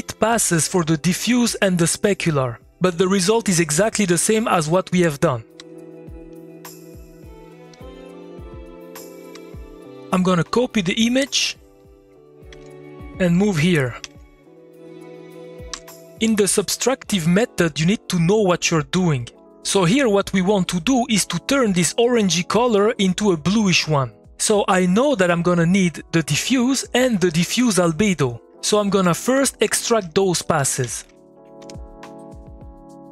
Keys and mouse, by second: 0.7 click, 2.5 2, 2.8 middle click, 3.5 click, 4.1 2, 4.5 middle click, 5.2 click, 5.5 2, 6.0 middle click, 6.3 click, 7.7 2, 7.9 click, 8.1 middle click, 8.6 click, 9.3 2, 9.7 middle click, 9.9 click, 11.2 middle click, 11.7 click, 12.5 ctrl+c, 13.0 middle click, 13.9 click, 14.6 click, 15.7 2, 28.8 middle click, 29.0 click, 30.0 Tab, 30.2-31.5 typing, 31.6 Return, 32.6-33.1 drag.